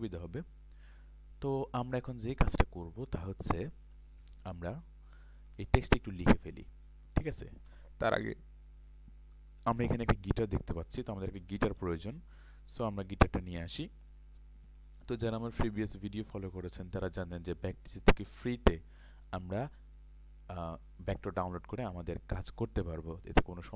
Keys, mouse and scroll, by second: 5.8 ctrl+space, 5.8 click, 6.7 click, 7.4 ctrl+space, 9.9 click.